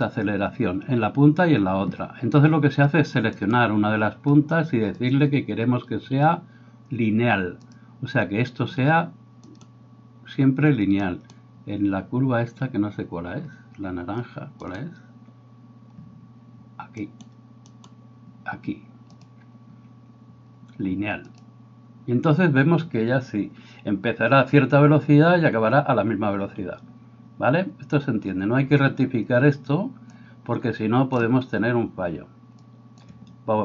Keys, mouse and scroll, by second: 3.3 right click, 5.0-14.7 drag, 9.4 right click, 11.1 right click, 14.7-18.0 middle drag, 14.8-17.7 drag, 17.0 right click, 18.0-33.6 drag.